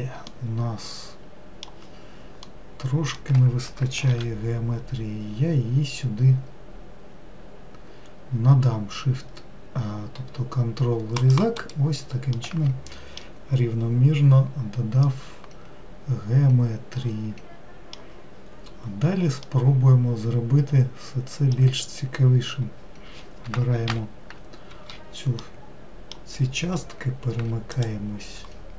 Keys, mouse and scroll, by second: 0.5-4.4 middle drag, 4.4 ctrl+r, 12.6-18.4 middle drag, 19.7-22.9 middle drag, 24.2 ctrl+l, 25.7-28.0 middle drag, 28.0-28.7 ctrl+drag.